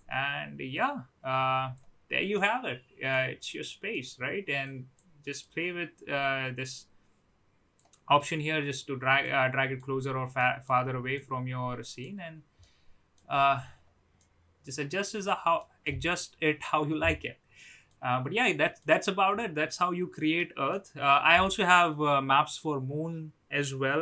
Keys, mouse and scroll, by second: 0.8-1.8 drag, 2.3-3.3 middle drag, 3.7-4.2 middle drag, 4.6 click, 5.4 click, 8.1-8.9 middle drag, 9.2-9.8 middle drag, 10.3-10.8 middle drag, 11.1-12.0 middle drag, 12.6-13.1 middle drag, 14.1-15.2 middle drag, 15.5-16.2 middle drag, 17.5-19.0 middle drag, 19.3-20.0 middle drag, 20.3-20.7 middle drag.